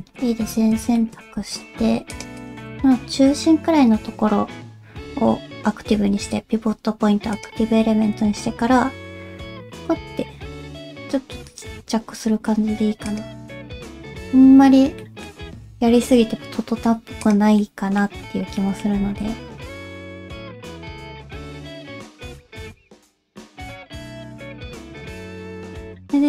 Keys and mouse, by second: 0.0 a, 0.9 shift+middle click, 1.3 alt+z, 2.1 shift+click, 2.4 shift+click, 3.4 middle click, 7.8 middle click, 8.4 s, 14.3 Tab, 15.0 middle click, 15.5 alt+a, 17.2 click, 17.6 middle click, 18.5 middle click, 19.0 alt+a, 19.6-23.9 drag, 25.2 click, 26.0-26.2 drag.